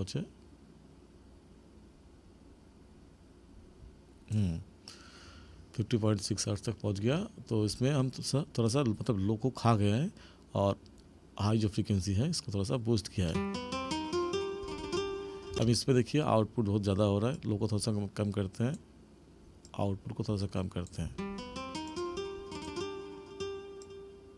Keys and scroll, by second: 13.2 space, 15.5 space, 21.0 space.